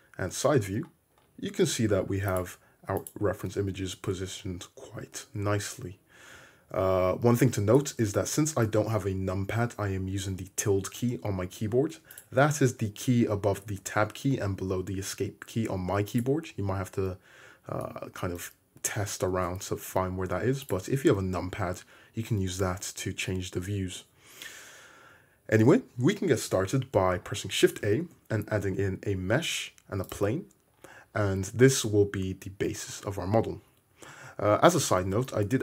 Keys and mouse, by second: 0.2 `, 2.3 click, 3.0 click, 3.1 middle click, 3.4 `, 5.4 `, 6.3 `, 9.8 `, 27.8 shift+a, 33.9 `.